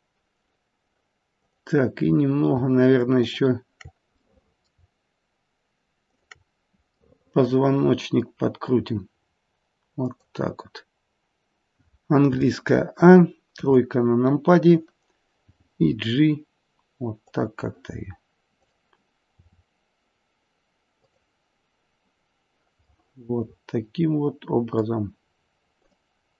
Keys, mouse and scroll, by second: 1.3 click, 3.1 shift+click, 4.2 middle click, 6.0 shift+click, 7.0 middle click, 8.8 r, 12.2 a, 13.5 KP_3, 15.6 g, 19.3 click, 19.3 r, 22.9 middle click, 25.7 click.